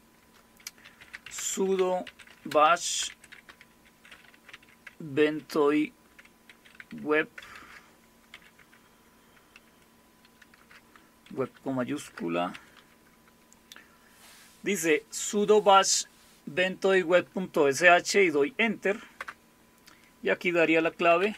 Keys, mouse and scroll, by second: 0.0-5.0 typing, 0.2 Return, 6.3-8.8 typing, 10.3-13.4 typing, 19.2 Return.